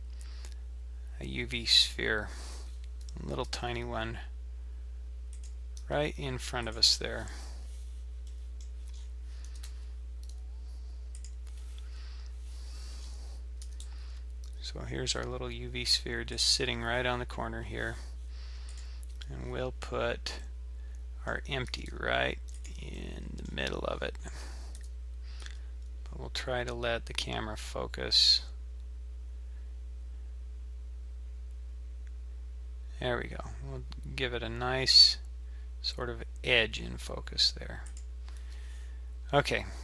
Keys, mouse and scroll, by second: 3.3 s, 5.8 g, 8.3 middle click, 8.9-9.5 scroll up 5, 9.5 g, 13.0-13.6 scroll up 5, 13.6 scroll up 2, 13.6 g, 18.7 click, 18.8 click, 19.4-20.4 scroll down 6, 20.4 middle click, 21.7 g, 23.0 middle click, 23.9-24.8 scroll up 4, 24.8 KP_7, 25.4 g, 39.2-39.8 scroll down 5.